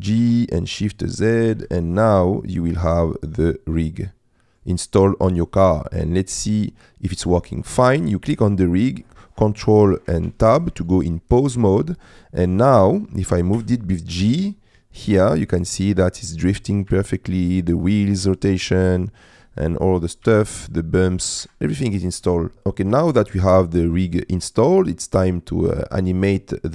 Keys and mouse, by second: 0.3 shift+z, 1.6 KP_Decimal, 2.5 click, 3.3 middle click, 4.1 middle click, 6.0 middle click, 8.4 click, 9.0 middle click, 10.3 ctrl+Tab, 11.8 middle click, 12.2 click, 12.6 click, 13.6 g, 16.9 Escape, 19.0 click, 20.2 g, 21.5 Escape, 22.0 middle click, 24.4 middle click, 25.8 middle click, 26.5 middle click.